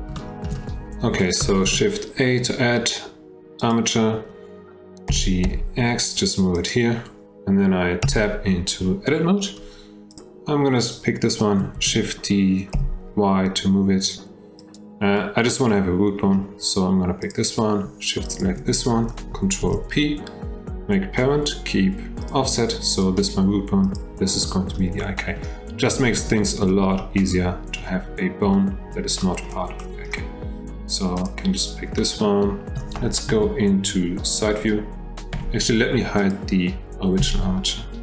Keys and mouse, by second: 0.2 shift+middle drag, 1.6 shift+a, 5.1 g, 8.0 Tab, 10.1 click, 11.7 shift+d, 15.1-16.3 middle drag, 17.2 click, 19.6 ctrl+p, 22.9 click, 23.9 click, 24.4 shift+middle click, 25.0 middle click, 26.4 shift+middle click, 27.3 middle click, 28.5 middle click, 29.2 shift+middle click, 29.8 middle click, 31.1 click, 32.0 shift+middle click, 33.3 KP_3, 35.3 F1, 36.1 click, 37.2 h.